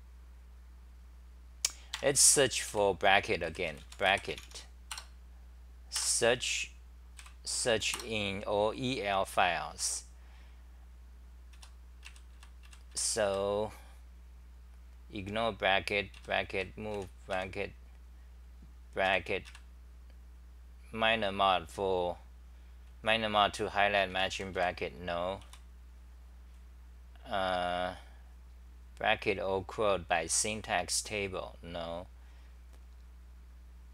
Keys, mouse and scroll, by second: 4.9 Return, 5.9 Return, 7.1 Up, 8.1 Return, 11.5 Left, 12.0 Right, 12.3 Right, 12.6 Right, 12.9 Right, 13.3 Right, 16.1 Right, 16.5 Right, 16.9 Right, 17.3 Right, 19.0 Right, 19.4 Right, 22.6 click, 23.1-24.1 scroll down 4, 24.1 Right, 24.3 Right, 24.5 Right, 25.4 Down, 26.5-30.0 scroll down 16, 30.0 click, 30.8 click, 31.2-32.8 scroll down 6, 32.8-33.9 scroll down 5.